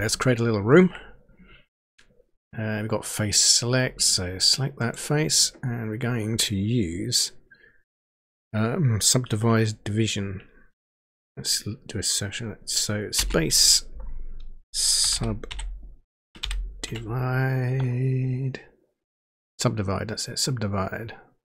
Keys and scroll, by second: 13.1 space, 14.7-16.8 typing.